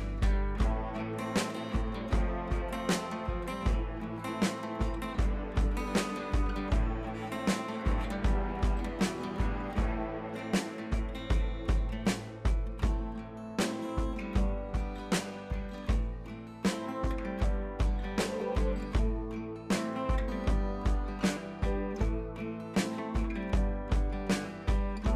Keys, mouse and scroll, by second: 0.1-0.9 click, 1.2 ctrl+z, 1.8-2.4 drag, 7.1 ctrl+j, 7.5 right click, 8.6 click, 12.8 click, 14.6 shift+F2, 15.3 b, 15.6-16.0 drag, 21.4 ctrl+e, 21.8 ctrl+shift+a.